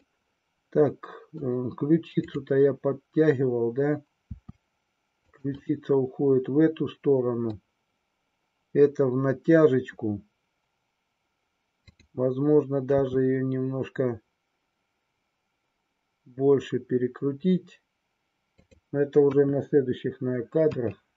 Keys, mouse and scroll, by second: 2.1-3.5 drag, 4.3 r, 5.8-7.5 middle drag, 11.9-13.3 drag, 13.3 r, 19.3 KP_1, 20.6 KP_3.